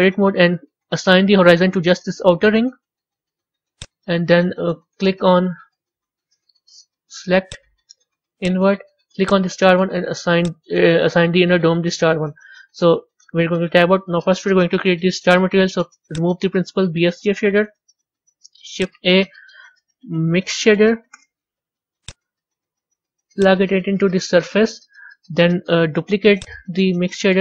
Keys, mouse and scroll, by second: 3.8 click, 8.4 click, 9.1 click, 10.4 click, 13.1 Tab, 16.1 click, 17.3 Delete, 19.3 shift+a, 23.3 drag, 26.3 click, 27.2 shift+d.